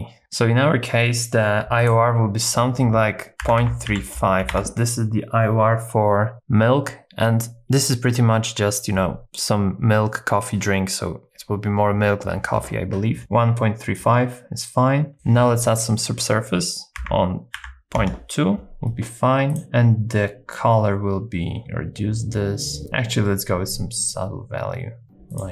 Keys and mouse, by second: 1.9-4.5 drag, 15.1-18.0 drag, 21.6-25.0 shift+drag.